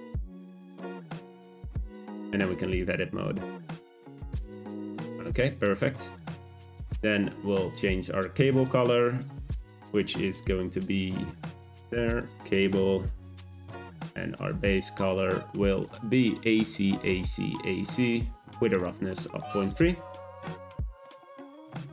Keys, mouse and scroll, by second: 1.9 Tab, 3.1-4.5 scroll down 1, 4.5 `, 6.1 click, 8.5 click, 11.7-14.7 drag, 19.7 click.